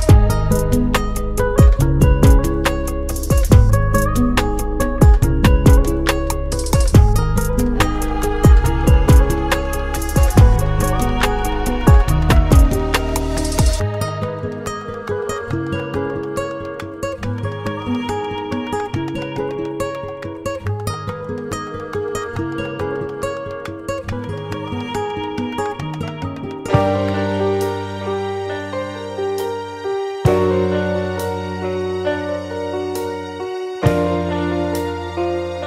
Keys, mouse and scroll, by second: 0.0 click, 1.0 click, 2.2 click, 2.4 double click, 3.9 click, 4.1 double click, 5.2 click, 9.2 click, 10.6 F4, 11.9 F9, 13.3 click, 14.9 ctrl+o, 16.0 scroll down 1, 17.4 click, 18.2 click, 22.0 F4, 23.2 F9, 26.4 ctrl+o, 27.5-28.1 scroll down 1, 28.6-29.2 scroll down 1, 31.1 click, 32.2 click, 35.3 F4.